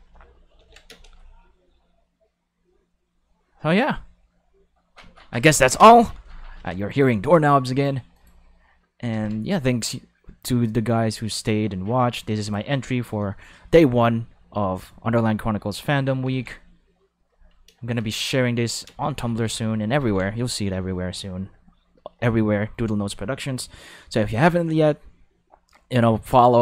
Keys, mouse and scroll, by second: 0.5 ctrl+5, 0.9 space, 5.8 space, 6.6 ctrl+5, 8.1 click, 9.1 ctrl+5, 11.4-12.5 drag, 16.2 ctrl+5, 17.7 space, 17.9 ctrl+5, 18.8 space, 19.0 5, 20.0 5, 24.3 click, 26.3 click.